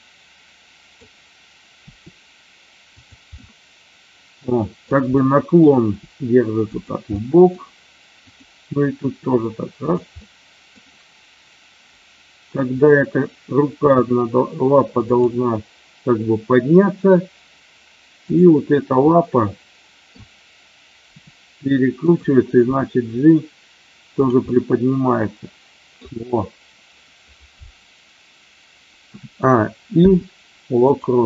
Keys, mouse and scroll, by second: 1.8 r, 2.9 click, 3.4-4.8 middle drag, 5.0 middle click, 5.9 r, 6.7 click, 7.0 middle click, 8.3 drag, 8.9 r, 10.2-10.8 middle drag, 12.7 click, 13.6 g, 15.1 click, 18.3 click, 19.0-20.0 middle drag, 21.1 r, 22.0 click, 24.1 click, 24.4-25.9 middle drag, 29.0 a, 29.9 i.